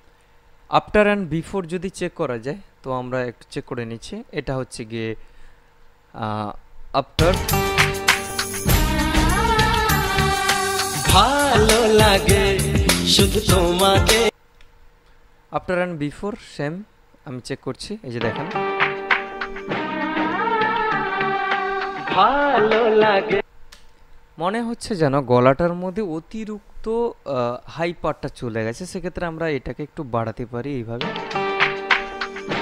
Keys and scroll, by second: 7.3 space, 18.4 space, 23.5 space, 31.2 space.